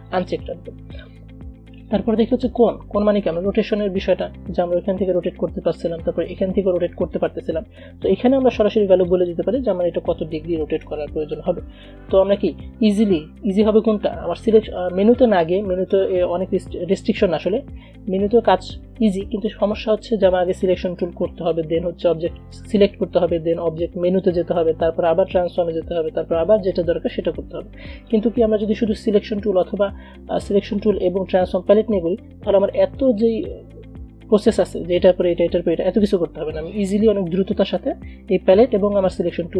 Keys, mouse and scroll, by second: 0.3 click, 9.1 click, 12.6 ctrl+z, 20.7 click, 28.2 click, 32.8-39.5 drag.